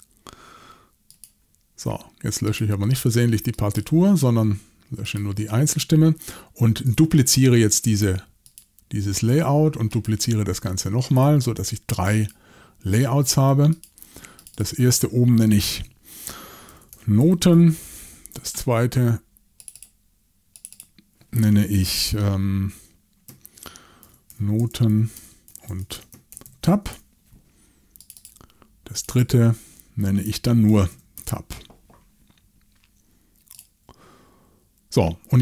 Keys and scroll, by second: 16.5-18.0 typing, 23.8-27.4 typing, 30.7-31.4 typing.